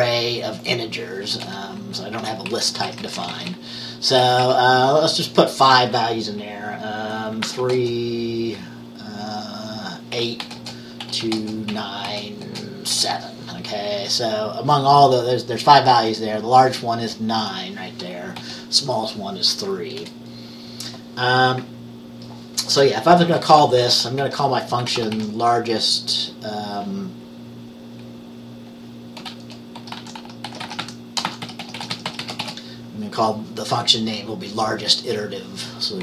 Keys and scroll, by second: 1.5 Return, 2.3 Up, 2.6 Right, 2.8 Right, 3.0 Right, 3.1 Right, 4.1 Right, 7.3-8.2 typing, 10.3-13.0 typing, 20.1 Return, 22.8 Return, 23.2-25.7 typing, 29.6-33.0 typing.